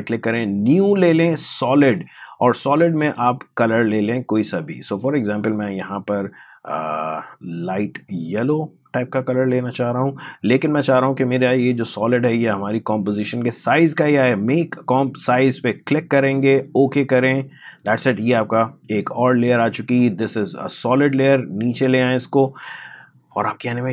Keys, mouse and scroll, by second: 1.7-15.2 drag, 15.9 click, 19.9-23.9 drag.